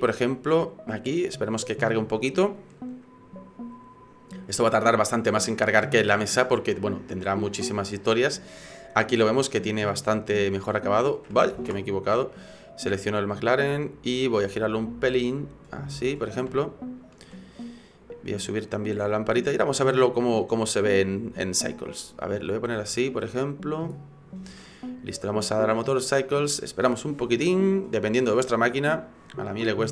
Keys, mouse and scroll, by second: 9.1 click, 10.5 click, 11.9 ctrl+z, 12.5 right click, 14.1 click, 16.6 shift+middle click, 18.2 right click, 19.4 click, 20.6 click, 21.8 middle click, 22.5 middle click, 22.9 shift+middle click, 23.2 shift+middle click, 23.4 middle click, 24.0-24.7 scroll up 1, 25.7 click.